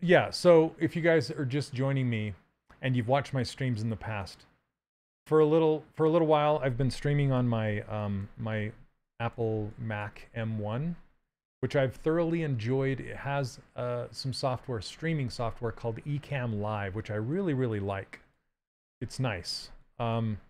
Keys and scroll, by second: 10.8 s, 19.9 s.